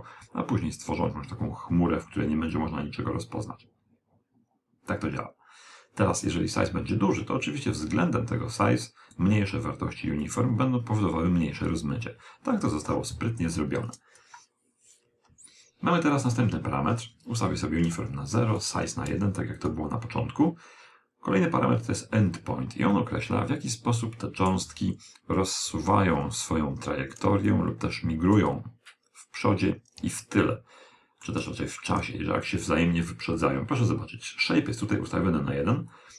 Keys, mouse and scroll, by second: 0.3 click, 7.9 click, 14.0 click, 16.2 click, 22.2 KP_1, 24.9 d, 25.1-26.8 right drag, 26.0 d, 26.6 d, 27.8-29.5 middle drag, 33.3 click.